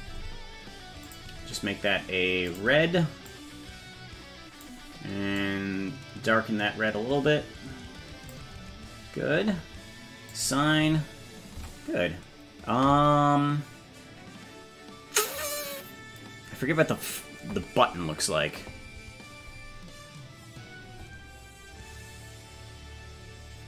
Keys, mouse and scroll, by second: 1.1 click, 2.5 click, 10.3 click, 11.6 Tab.